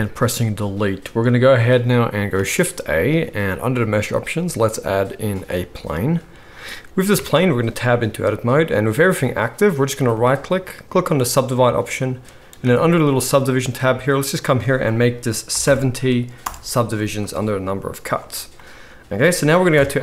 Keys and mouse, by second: 2.3 shift+a, 2.5-5.8 middle drag, 7.1 Tab, 9.1 click, 13.1 click, 13.1 middle click, 13.1 right click, 13.5 click, 13.5 middle click, 13.5 right click, 15.4 click, 15.4 middle click, 15.4 right click, 16.3-17.7 drag, 16.3-17.7 middle drag, 16.3-17.7 right drag, 19.7 KP_7.